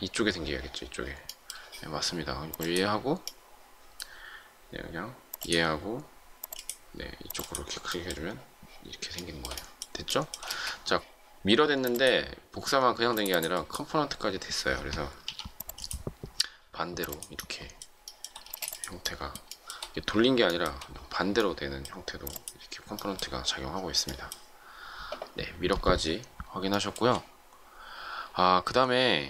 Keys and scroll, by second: 11.6 space, 15.2 p, 18.4 shift+space.